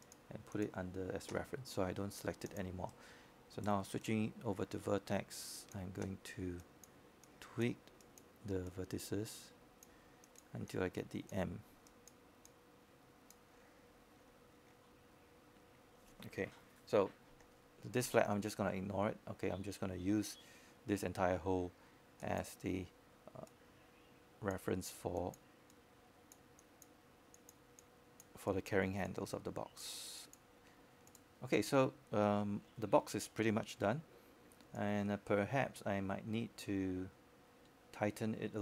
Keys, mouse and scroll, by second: 1.7 q, 2.1 click, 3.7 w, 5.2 click, 5.8-6.5 scroll down 1, 6.5 right click, 7.2 click, 13.6-14.3 scroll up 1, 14.3 click, 14.7 right click, 15.7-25.6 drag, 25.6-26.2 scroll down 1, 26.2-26.6 scroll up 1, 34.4 click, 35.1-35.7 scroll up 1, 35.7-36.8 drag.